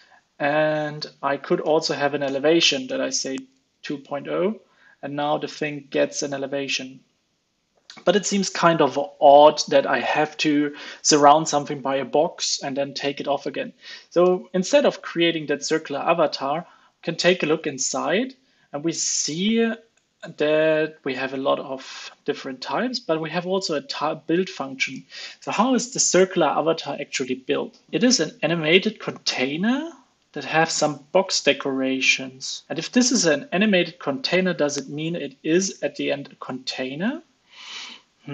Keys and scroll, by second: 0.3 ctrl+space, 3.5 super+s, 14.2 alt+Return, 16.2 super+b, 34.0 super+b.